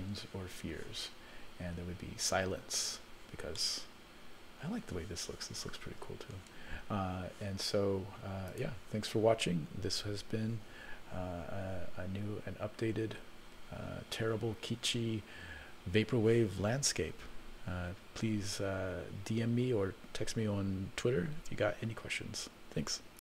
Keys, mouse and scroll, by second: 3.6-4.7 middle drag, 8.6 click, 10.3 F12.